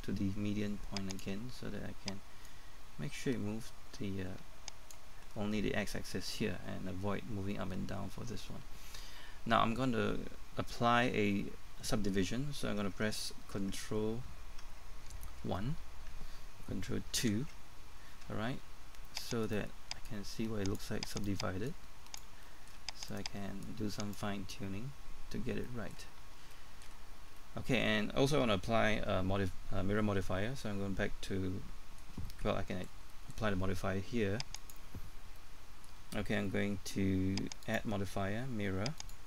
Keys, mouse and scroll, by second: 17.1 ctrl+2, 18.6-19.2 scroll up 1, 19.4 right click, 20.1 click, 21.2 right click, 21.7 click, 23.1 right click, 23.6 click, 25.2-25.5 scroll down 1, 26.1-26.4 scroll up 1, 26.9-27.2 scroll down 1, 32.3 middle click, 34.6 click, 35.4 middle click, 37.6 click.